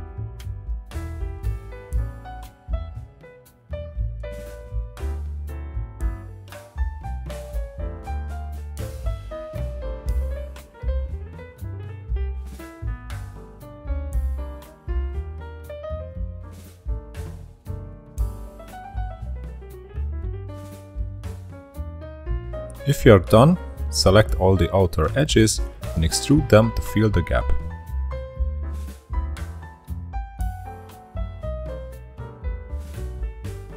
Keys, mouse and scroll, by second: 1.7 1, 1.8 click, 2.6 click, 3.3 click, 4.3 2, 4.4 click, 4.7 e, 5.7 click, 6.1 click, 6.6 1, 7.1 click, 7.7 click, 8.2 click, 8.9 2, 9.0 click, 10.0 click, 10.3 1, 10.4 click, 10.7 click, 11.5 2, 11.6 click, 11.8 click, 12.7 1, 12.8 click, 14.4 2, 14.5 click, 14.8 e, 16.2 1, 16.6-17.0 drag, 18.2-18.6 scroll down 1, 18.6-20.3 shift+middle drag, 20.9-22.4 shift+middle drag, 22.4 2, 22.7 alt+click, 23.7 alt+shift+click, 24.5 shift+click, 24.9 shift+middle drag, 25.0 e, 28.0 shift+middle click, 28.6 click, 30.7 scroll up 2, 30.8 click, 32.2 scroll down 4, 32.6-33.4 shift+middle drag, 33.4 Tab, 33.6 click.